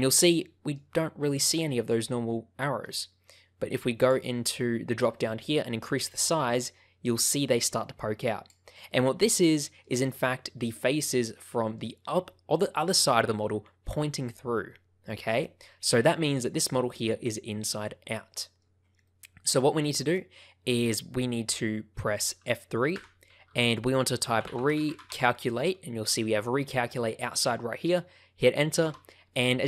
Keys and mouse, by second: 0.8 shift+middle click, 1.3-2.8 middle drag, 2.9 shift+middle click, 4.1-8.6 drag, 8.8 middle click, 10.2 middle click, 10.9 middle click, 14.6-16.4 middle drag, 18.3 middle click, 19.0 middle click, 19.8 middle click, 22.9 F3, 23.2 BackSpace.